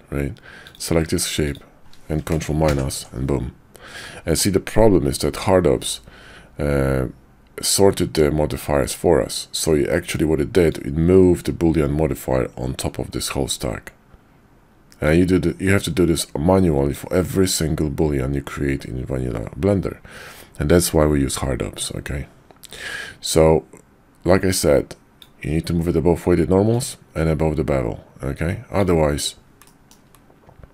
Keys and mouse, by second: 0.6 click, 1.4 shift+click, 2.6 ctrl+KP_Subtract, 10.8-12.9 drag, 15.1-17.0 drag, 22.8-25.2 drag, 26.7-28.8 drag, 29.6 middle drag.